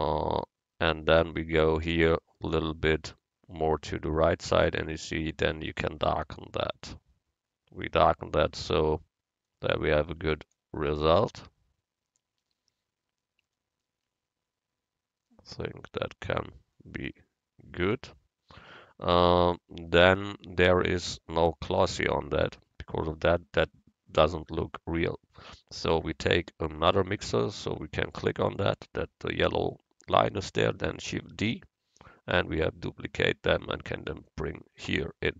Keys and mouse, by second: 1.5-3.4 drag, 1.5-3.4 middle drag, 1.5-3.4 right drag, 8.7-9.8 middle drag, 23.7-27.9 drag, 31.4 shift+d, 35.2-35.3 drag.